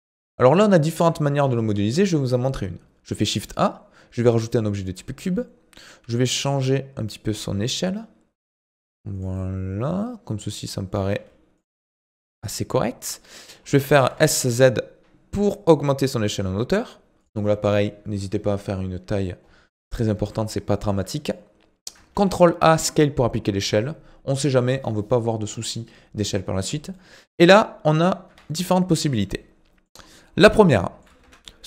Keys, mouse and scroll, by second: 0.5 middle click, 0.9-1.9 scroll up 8, 1.9 shift+a, 5.3 middle click, 6.0 s, 9.3-11.1 middle drag, 11.1 s, 11.7-13.3 middle drag, 13.3-13.7 scroll down 9, 13.7 middle click, 14.0 s, 19.9 middle click, 20.3-20.7 scroll up 1, 20.7-22.1 shift+middle drag, 22.1 ctrl+a, 26.8 scroll down 2, 26.9 middle click, 27.5-28.3 scroll up 1, 28.3 KP_7, 29.0-29.3 scroll up 6, 29.3 shift+middle click, 30.0-30.7 scroll up 6, 30.7 shift+middle click, 31.2 Tab.